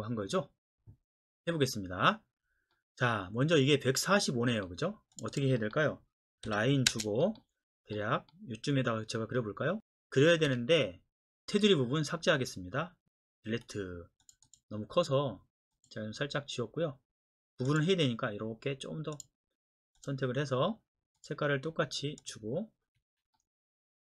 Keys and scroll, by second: 6.5-6.9 typing, 10.5 Escape, 13.4 Delete, 19.8 Escape, 23.0 Escape.